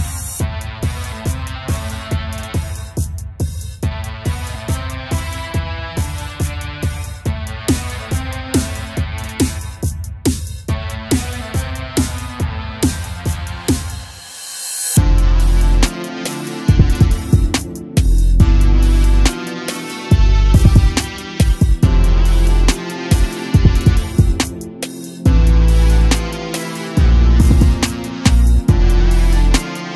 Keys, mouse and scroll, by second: 0.1 click, 1.6 i, 4.3 KP_1, 5.0-6.0 shift+middle drag, 6.0 ctrl+right click, 7.0 right click, 7.7 s, 10.4-10.8 scroll up 2, 10.8 a, 10.9 a, 12.3-12.6 scroll down 1, 12.6-13.8 middle drag, 13.8-14.5 scroll up 2, 14.5 2, 14.6 click, 14.8 click, 15.1 s, 16.3-18.0 middle drag, 18.0 3, 18.1 click, 18.3 click, 18.8 s, 20.1-20.4 scroll down 1, 20.4-21.5 shift+middle drag, 21.5 3, 21.7 click, 23.1 i, 24.6 KP_Add, 25.2 s, 26.4 Tab, 26.7 scroll down 4, 27.0 a, 27.1 a, 27.3 KP_0, 28.7-29.1 shift+middle drag, 29.1-29.8 scroll up 5, 29.8 click.